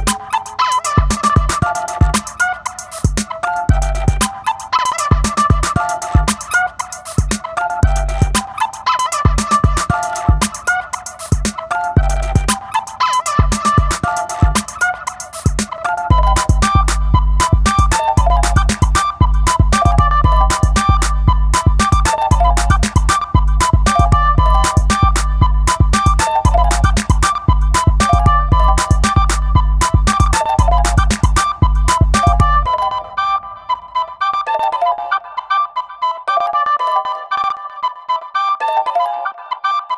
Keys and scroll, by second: 22.0 super+], 24.8 super+t, 34.0 space, 37.2 b.